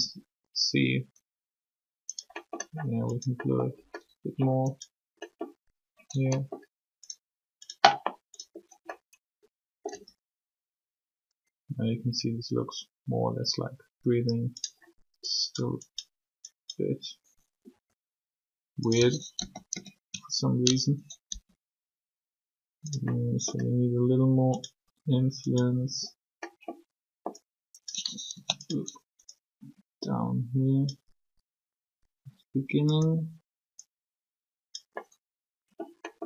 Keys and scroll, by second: 9.9 r, 17.7 r, 19.4 ctrl+z, 19.7 ctrl+z, 21.3 r, 28.3 ctrl+z.